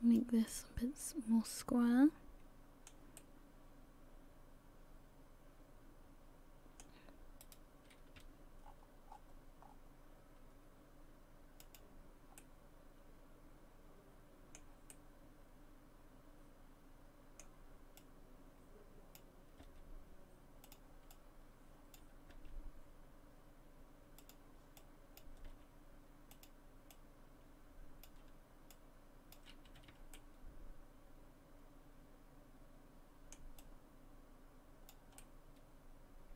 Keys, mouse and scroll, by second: 0.5 middle click, 3.2 middle click, 7.4 right click, 8.2 g, 12.4 middle click, 14.9 middle click, 18.0 middle click, 18.0 click, 19.6 g, 21.1 click, 22.3 g, 24.8 click, 25.5 g, 26.9 click, 28.7 click, 29.7 a, 29.9 a, 30.2 middle click, 33.6 click, 35.2 middle click.